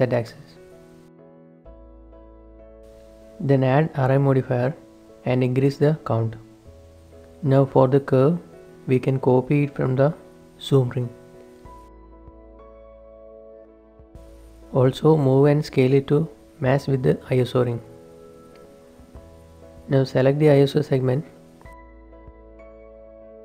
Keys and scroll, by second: 0.9 typing, 2.2 Tab, 2.5 z, 3.0 ctrl+shift+s, 13.2-14.2 typing, 16.4 Tab, 17.0 Tab, 19.1 ctrl+a, 19.6 ctrl+s.